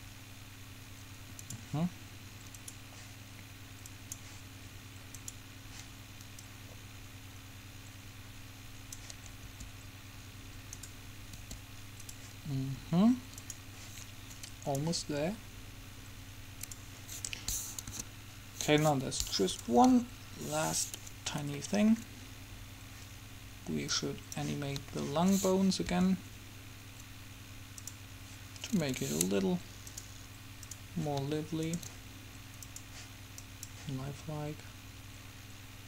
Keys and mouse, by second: 2.8-4.1 drag, 4.3-8.2 drag, 9.6 r, 11.5 r, 13.5-16.3 drag, 16.8 click, 18.1 KP_3, 19.0 click, 19.9 KP_7, 19.9 right click, 24.1 click, 25.0 middle click, 25.4-26.8 drag, 26.0 r, 30.0-31.8 drag, 32.7 click, 33.7 click.